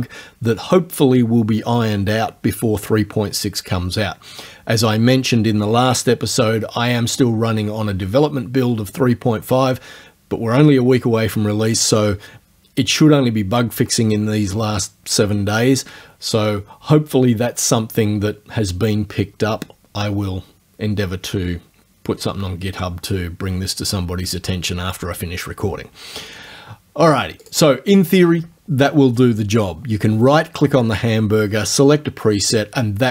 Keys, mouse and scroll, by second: 27.4 click.